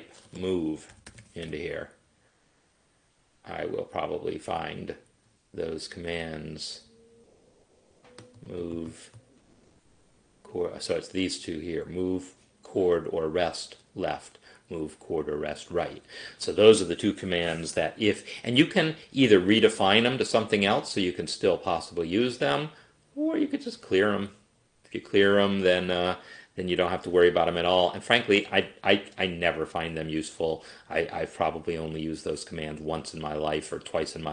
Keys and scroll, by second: 0.8-2.0 typing.